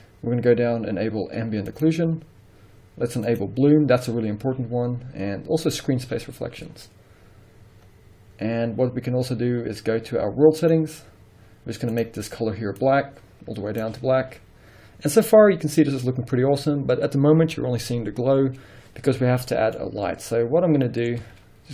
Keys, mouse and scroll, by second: 1.8 click, 3.4 click, 5.8 click, 7.2-7.9 scroll down 1, 7.9-9.7 scroll up 1, 10.7 click, 12.0 click, 15.1-19.1 scroll up 1, 19.2-19.6 scroll down 1, 19.6 middle click, 19.8-20.2 scroll down 2, 20.2 middle click, 20.7 scroll down 1, 20.9 middle click, 21.3 z.